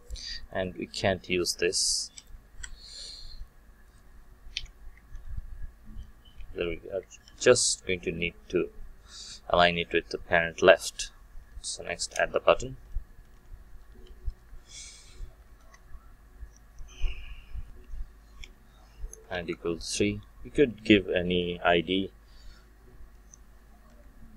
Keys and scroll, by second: 2.5 Delete, 5.1 ctrl+c, 6.3 Tab, 7.2 ctrl+v.